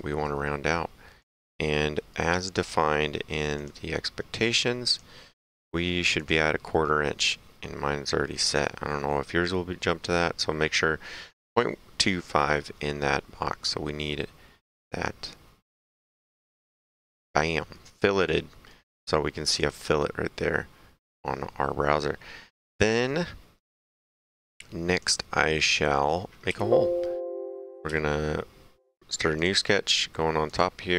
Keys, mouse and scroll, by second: 0.0 right click, 1.2 click, 1.8 middle click, 2.2 right click, 3.6 click, 4.9 click, 6.2 click, 16.1 click, 17.3 middle click, 17.8 right click, 19.5 click, 21.9 middle click, 22.8 click, 23.3 middle click, 24.3 click, 26.9 s, 27.9 s, 28.9 click, 30.5 click.